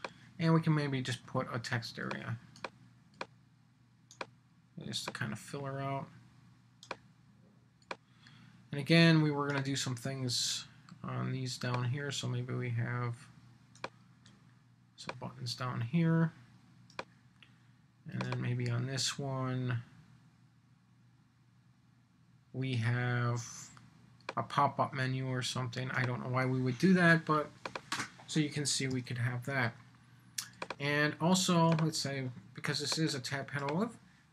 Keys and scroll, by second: 28.9 super+s.